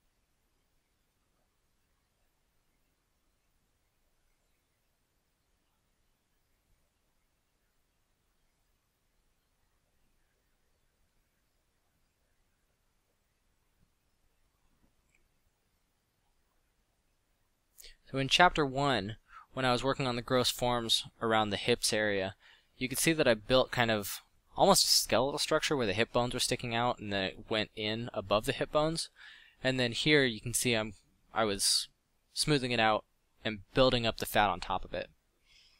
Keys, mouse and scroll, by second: 4.0 f, 5.1 f, 8.3 f, 13.1 f, 15.5 f, 17.5 f, 17.9 f, 21.2 f, 22.3 f, 28.5 f, 30.6 f, 32.7 f, 35.0 f.